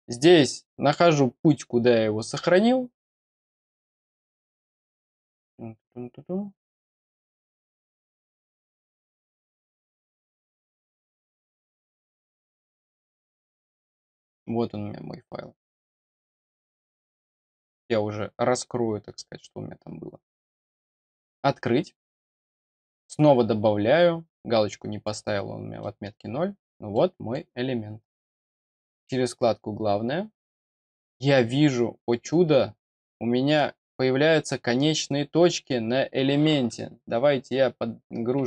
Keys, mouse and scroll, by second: 0.3 click, 6.0 scroll up 1, 7.9 click, 9.9-10.8 scroll down 2, 10.8-11.5 scroll up 1, 11.5 click, 11.7 click, 13.7 click, 20.9 click, 23.0 click, 24.4-24.7 scroll down 1, 24.7 middle click, 25.8 middle click, 26.3 scroll up 1, 26.9 middle click, 28.5 click, 29.0 click, 30.4 scroll up 1, 34.9-35.5 scroll up 2, 36.2-36.8 scroll down 1, 37.1-38.4 scroll down 2.